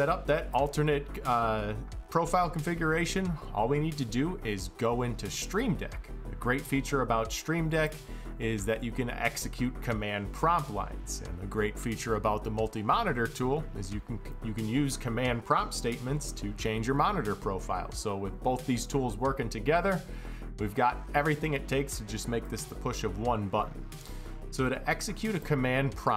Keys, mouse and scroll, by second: 0.1 click, 4.8 click, 7.5 click, 9.1 click, 15.9 click, 17.7-18.6 drag, 22.0 click, 25.1 click.